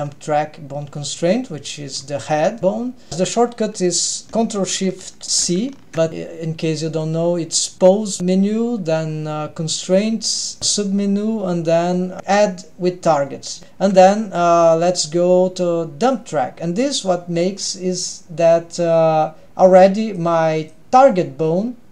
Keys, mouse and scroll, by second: 1.5-2.2 scroll up 2, 2.4-3.1 scroll down 1, 5.9 ctrl+shift+c, 7.1-13.6 drag, 16.3 click, 20.2-20.7 drag.